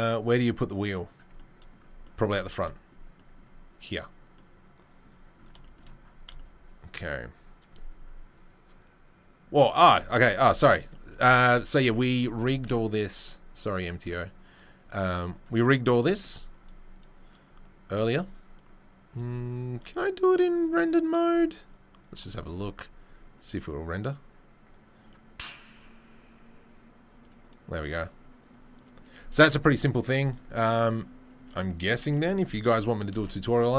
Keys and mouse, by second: 12.9 ctrl+s, 14.8-31.4 drag, 31.4-33.7 middle drag, 31.9 Tab, 32.1 a, 33.1 Tab.